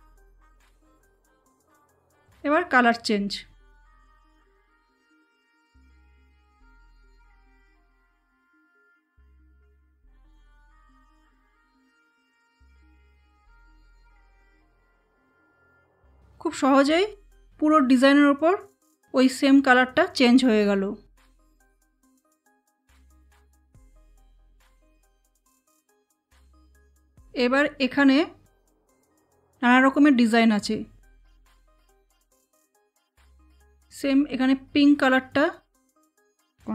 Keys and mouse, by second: 0.7 click, 5.3 click, 10.8-13.2 drag, 22.1 space, 22.5 click, 22.6 space, 25.7 click, 33.7 click, 33.7 click.